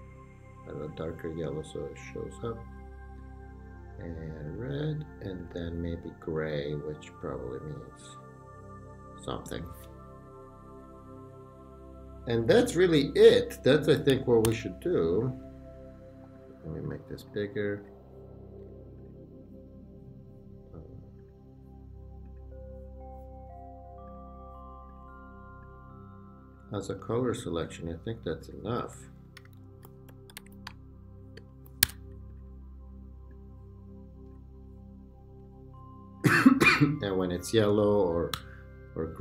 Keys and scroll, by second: 14.4 super+d, 26.7 Left, 28.6 Right, 29.0 Down, 29.4 Right, 29.5 Down, 29.8-31.8 typing, 38.4 super+=.